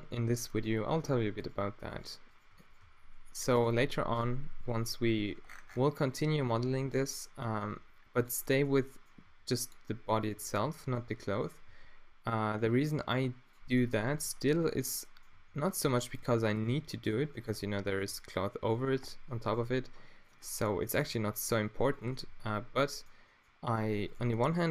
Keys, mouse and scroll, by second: 2.8 w, 6.6 middle click, 7.6 g, 8.3 click, 8.6 middle click, 8.6 click, 8.8 middle click, 9.0 click, 9.3 r, 10.2-11.7 middle drag, 11.7 g, 12.9 g, 14.1 g, 15.4 r, 15.9 g, 16.6-18.2 middle drag, 16.7 g, 19.0 middle click, 19.5 click, 19.6 g, 20.3 middle click, 21.1 g, 23.0 middle click, 23.6-24.7 middle drag.